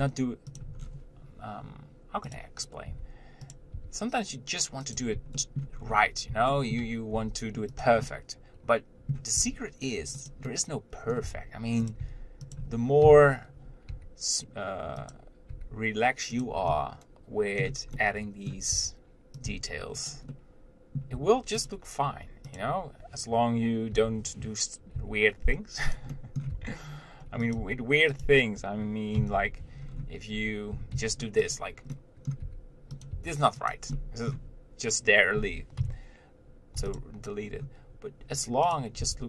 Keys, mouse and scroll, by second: 1.0 scroll down 1, 2.6 click, 3.2 g, 4.0 r, 5.6 shift+middle click, 6.0-6.7 scroll up 1, 6.8 shift+middle click, 7.4 g, 8.3-9.8 middle drag, 9.8 r, 10.7 middle click, 11.5 r, 12.3 g, 14.2 g, 15.7 g, 16.9-19.0 middle drag, 19.0 r, 19.7 g, 20.6 middle click, 21.4 Tab, 21.9 click, 22.8 click, 24.1 o, 26.4 middle click, 26.7 r, 27.8 g, 29.6 Tab, 30.1-31.0 scroll down 1, 31.0 scroll down 1, 31.2 shift+d, 32.2 middle click, 32.7 g, 33.4 r, 34.2-36.0 middle drag, 37.2 x, 37.7-39.0 scroll down 1, 39.0 click.